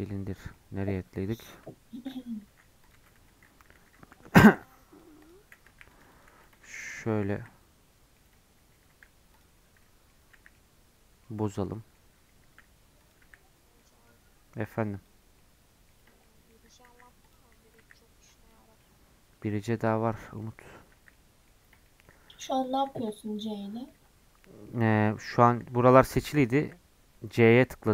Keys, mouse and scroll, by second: 0.0-0.4 scroll down 9, 0.5-1.5 middle drag, 1.5 KP_Decimal, 2.1-2.4 scroll down 4, 2.5 s, 2.9 Tab, 3.5 scroll down 2, 3.8 3, 4.4 c, 7.3 c, 8.9 s, 9.8 middle click, 10.3 c, 11.7 middle click, 12.4 s, 13.2 c, 16.2 middle click, 16.9 s, 17.8 c, 19.9-20.9 middle drag, 20.9 c, 21.8 middle click, 22.3 s, 23.0 Tab, 23.1-24.7 middle drag, 24.7 Tab, 24.9 scroll up 1, 25.7 a, 26.1 scroll down 1, 26.6 c.